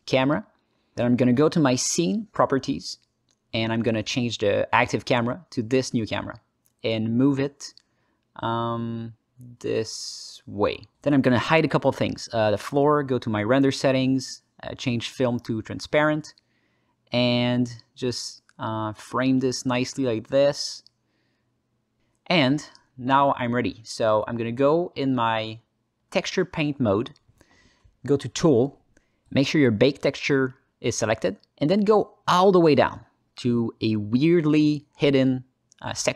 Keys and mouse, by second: 1.4 KP_0, 4.2 click, 5.7 ctrl+alt+middle click, 5.9 ctrl+alt+middle click, 6.2 ctrl+alt+middle click, 6.4 ctrl+alt+middle click, 6.7 alt+middle click, 6.9 alt+shift+middle click, 7.3-8.7 alt+middle drag, 9.8-10.7 alt+middle drag, 11.0 click, 12.1 click, 13.1 click, 14.0 click, 14.3 alt+middle click, 15.5 click, 16.5 alt+shift+middle click, 17.1 ctrl+alt+middle click, 17.6-19.6 alt+middle drag, 19.9 alt+shift+middle click, 20.1-21.8 alt+drag, 22.0 alt+shift+click, 22.3 alt+click, 22.8 alt+shift+click, 23.0 alt+click, 23.5 alt+shift+click, 24.8 ctrl+alt+click, 25.4 ctrl+alt+click, 27.4-28.1 drag, 29.2 n, 30.3 click, 31.1 click, 31.9 middle click, 32.6 alt+middle drag, 35.2 click, 35.5 alt+middle click.